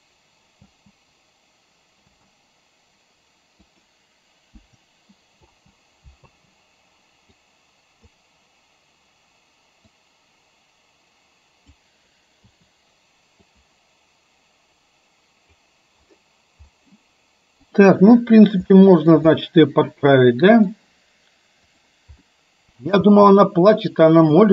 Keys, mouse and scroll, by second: 0.8 space, 3.7 click, 4.7 Delete, 5.6 space, 7.6 click, 7.6 space, 10.0-12.0 drag, 13.7-15.7 drag, 17.7 click, 18.8-19.2 shift+middle drag, 19.3-20.7 middle drag, 21.8 click, 22.2-23.0 middle drag, 23.2 space.